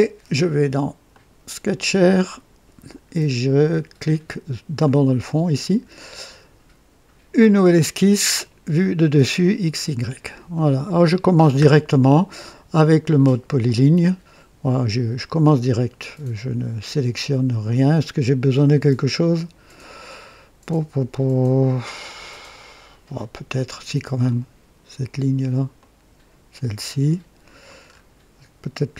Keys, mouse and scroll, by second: 1.0 right click, 1.3 click, 2.3 click, 4.7 click, 6.1 click, 9.3 click, 10.5-11.5 right drag, 13.6 click, 24.2 click, 25.7 click, 27.8-28.1 scroll up 2.